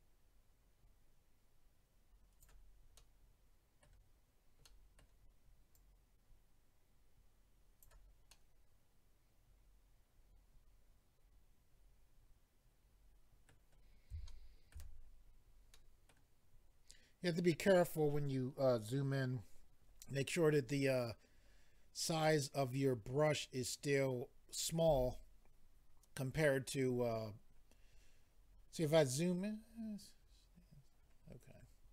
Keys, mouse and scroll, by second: 3.0 middle click, 4.6 middle click, 5.7 click, 8.3 middle click, 14.3 shift+middle click, 14.7 middle click, 15.0-15.7 scroll up 4, 15.7 middle click, 21.3 scroll down 2, 22.2 middle click, 27.4-28.3 scroll up 1, 28.3-29.1 scroll up 6, 29.6 scroll up 1, 30.2-31.0 scroll down 7, 31.7-31.9 scroll up 3.